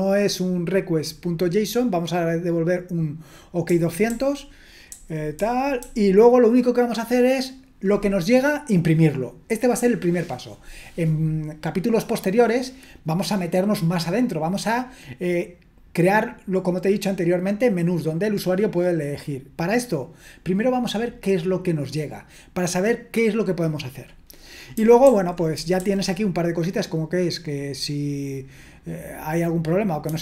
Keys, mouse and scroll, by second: 3.7-5.8 typing, 24.7-25.7 typing, 30.0 typing.